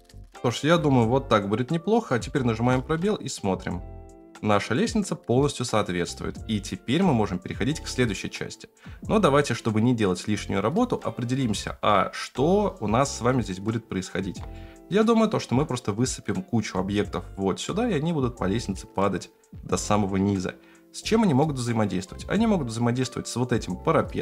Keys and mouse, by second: 2.2-2.6 shift+middle drag, 2.7 space, 7.4 middle click, 8.0-8.6 middle drag, 8.4 click, 8.4 right click, 11.7 space, 12.4 middle click, 14.5-15.0 shift+middle drag.